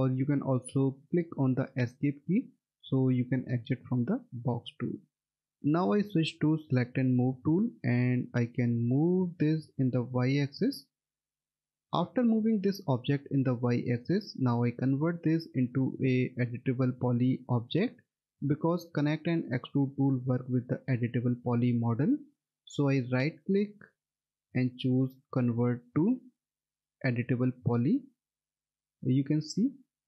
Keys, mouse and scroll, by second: 2.2 right click, 4.7 Escape, 7.2 click, 23.1 right click, 27.7 click.